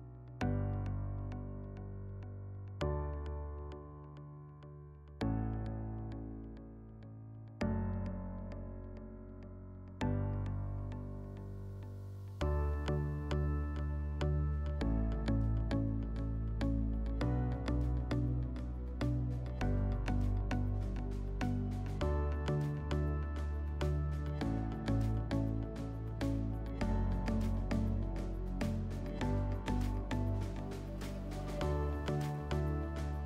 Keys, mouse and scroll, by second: 0.2 click, 2.8-4.3 drag, 4.5 drag, 7.8 click, 9.2 click, 13.0 click, 14.9 shift+click, 16.7 shift+click, 19.0 shift+click, 22.5 shift+click, 24.7 shift+click, 26.4 shift+click, 28.5 click, 29.6 click.